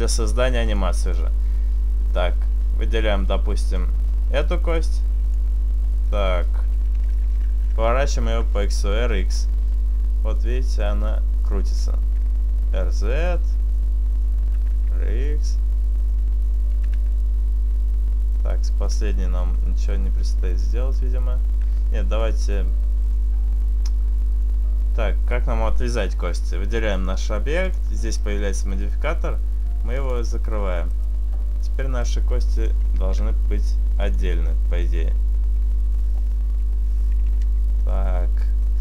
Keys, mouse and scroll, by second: 0.3 click, 2.0 right click, 3.1 right click, 3.7 right click, 4.5 click, 6.0 right click, 9.2 r, 11.5 right click, 11.9 right click, 12.2 r, 14.2 right click, 16.7 right click, 17.2 r, 19.6 r, 20.4 r, 21.8 right click, 22.3 click, 23.0 click, 24.4 right click, 27.7 click, 29.7 click, 30.9 right click, 32.1 click, 33.1 ctrl+z, 34.7 click, 37.5 Tab.